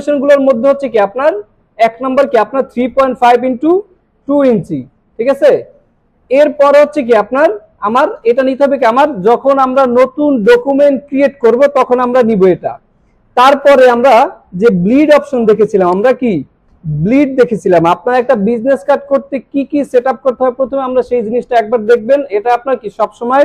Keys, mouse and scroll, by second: 2.2-3.1 drag, 7.4 scroll down 1, 7.9 scroll down 1, 8.3 scroll up 1, 13.1 scroll up 1, 14.1 click.